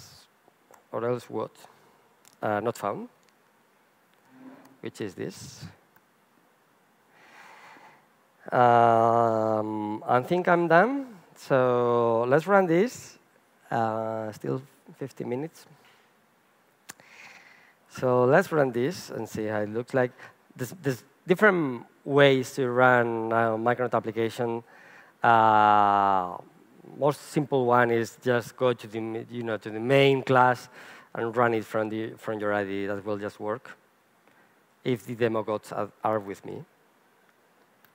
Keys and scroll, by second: 0.7 Return, 9.7 super+s, 16.9 alt+F12.